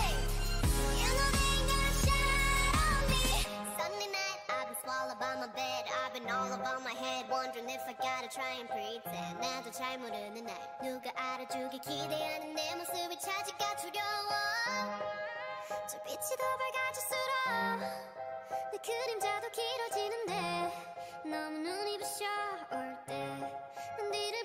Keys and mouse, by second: 3.8 g, 4.8 a, 5.7 Tab, 7.0 Tab, 7.9 Tab, 9.9 Tab, 10.9 a, 11.1 a, 11.4 a, 11.8-13.0 drag, 15.7 middle click, 16.7 a, 17.1-19.1 drag, 19.1 e, 20.5 g, 21.5 o, 21.9 g, 24.1 a.